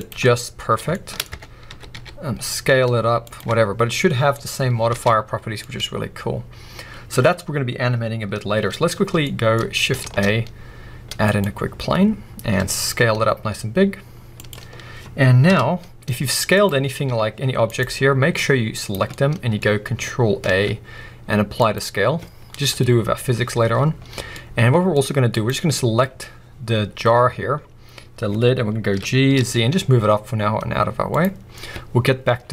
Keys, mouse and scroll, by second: 0.1 click, 0.2-1.3 middle drag, 1.3 Tab, 1.7 a, 1.9 s, 3.3 click, 3.4 Tab, 4.9 alt+a, 5.1-5.6 scroll down 2, 5.6-14.5 middle drag, 9.0 scroll down 2, 9.5-9.9 scroll up 2, 9.9 shift+a, 11.6-12.3 scroll down 2, 12.3 s, 14.5 click, 14.7-15.4 scroll up 1, 15.4 KP_1, 16.1-16.5 scroll up 1, 16.5 click, 16.8 scroll down 1, 17.1 s, 17.8 right click, 18.3 click, 19.0-25.3 middle drag, 19.6-20.4 scroll up 2, 20.4 ctrl+a, 23.5-23.9 scroll up 2, 23.9-24.3 scroll down 2, 24.9-25.3 scroll up 2, 25.3 click, 26.4-27.0 scroll up 2, 27.0-27.8 scroll down 2, 27.8-28.4 scroll down 1, 28.4-28.9 scroll down 1, 28.9 g, 31.1 click, 31.4 scroll up 1.